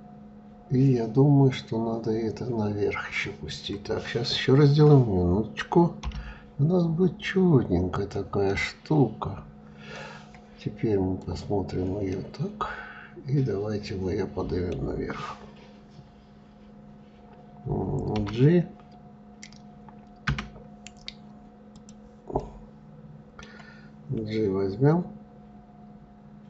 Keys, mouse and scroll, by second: 8.1-10.8 middle drag, 10.8 click, 11.7-14.7 middle drag, 21.3 click, 22.0-25.0 middle drag.